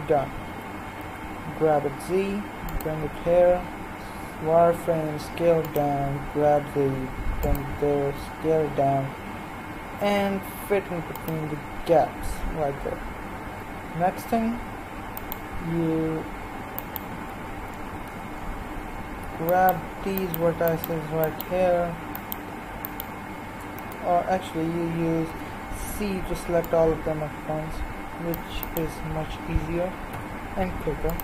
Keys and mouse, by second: 0.5 g, 3.0 z, 4.2 s, 6.0 g, 8.2 s, 12.7 middle click, 13.9-15.1 middle drag, 15.1-18.7 right drag, 18.0 z, 18.7 z, 24.1 right click, 25.2 c, 28.7-30.1 right drag, 30.1 x.